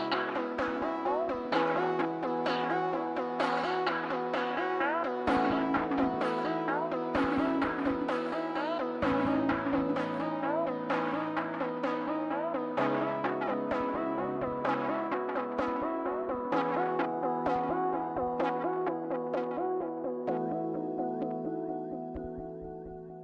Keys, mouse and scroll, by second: 1.1 scroll down 1, 1.2 middle click, 1.6 scroll up 1, 1.9 middle click, 12.3 middle click, 12.4 scroll down 1, 12.5 middle click.